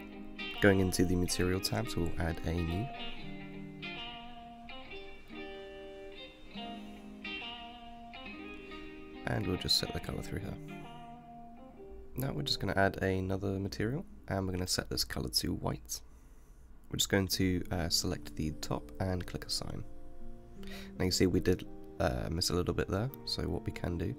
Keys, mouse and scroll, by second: 1.2 click, 3.1-7.3 drag, 10.2 click, 11.9 click, 13.5-16.7 drag, 17.8-20.1 middle drag, 20.1-21.2 drag, 21.2-21.7 scroll up 3, 21.7-24.1 middle drag.